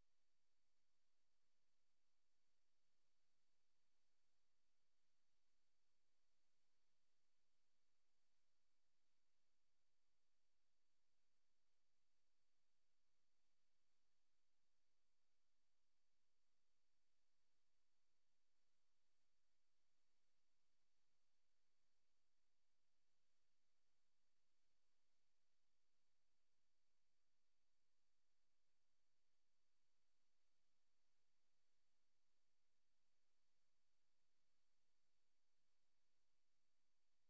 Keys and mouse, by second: 0.0 click, 0.3 click, 1.8 click, 5.7-6.7 drag, 7.4 click, 7.9 click, 8.4 click, 9.0 click, 14.4 click, 16.0 click, 17.8 click, 18.7 click, 20.4 click, 20.8 click, 21.2 click, 21.6-22.8 drag, 23.9 click, 24.6 click, 25.4 click, 25.7 click, 26.6 click, 26.8 click, 27.9 click, 28.5 click, 29.5 click, 29.8 click, 30.2 click, 30.6 click, 32.8 click, 34.4 click.